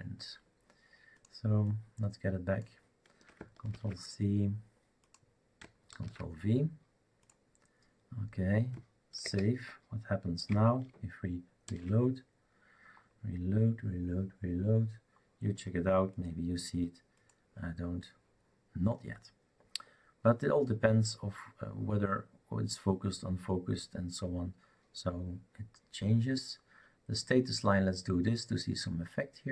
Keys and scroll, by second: 3.7 ctrl+c, 6.0 ctrl+v, 9.2 ctrl+s, 11.7 shift+super+r.